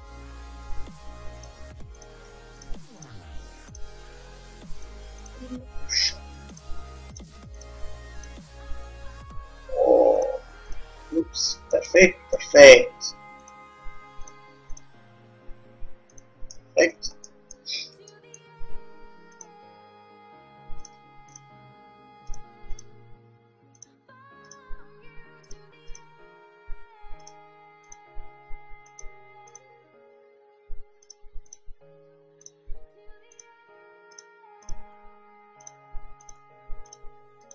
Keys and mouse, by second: 0.0-1.9 drag, 0.3 g, 2.1-4.8 drag, 2.2 g, 3.2 g, 4.2 g, 5.3-9.4 drag, 5.5 g, 6.8 g, 7.8 g, 8.6 g, 10.8-16.6 drag, 10.9 g, 13.8 g, 15.0 g, 16.7 middle click, 16.9 click, 17.6-19.8 middle drag, 19.6 click, 20.0 g, 21.0-24.6 drag, 21.6 g, 23.1 g, 24.8 g, 26.2 g, 28.2 g, 29.9 g, 31.4 click, 31.9 g, 33.4 click, 33.6 g, 34.9-37.5 drag, 34.9 g, 36.5 g.